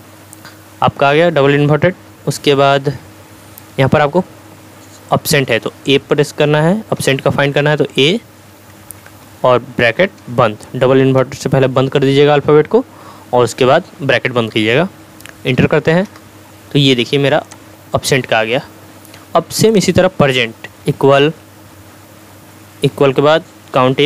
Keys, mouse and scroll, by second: 7.0 a, 10.9 shift+0, 16.0 Return, 17.4 click, 20.8 =, 22.8 typing.